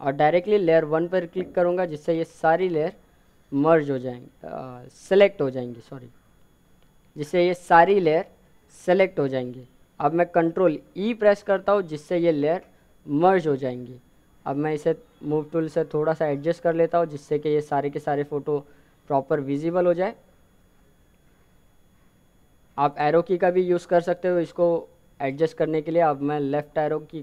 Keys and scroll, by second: 9.3 ctrl+e, 21.2 Down.